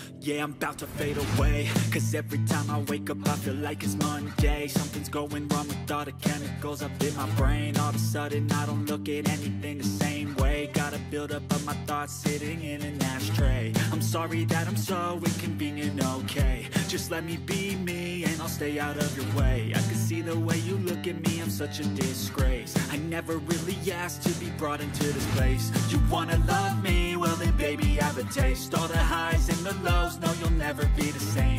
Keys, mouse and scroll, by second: 0.0 ctrl+a, 17.1 ctrl+a, 18.7 ctrl+d, 25.9-27.7 scroll up 11, 27.7-28.9 scroll up 1.